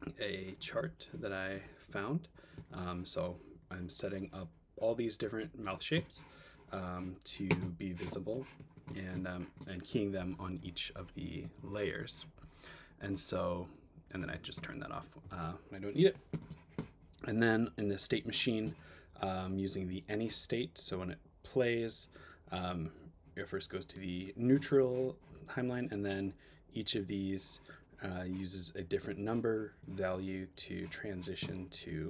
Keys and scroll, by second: 0.7 space.